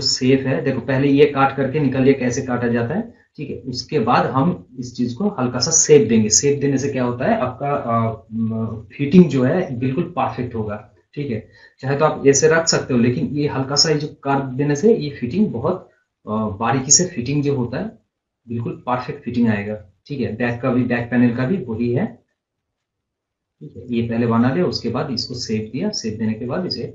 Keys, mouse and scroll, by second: 6.3-7.4 scroll down 1, 19.6-20.3 scroll down 1, 22.3-25.2 drag, 25.2-25.6 scroll up 1, 26.0 scroll up 1.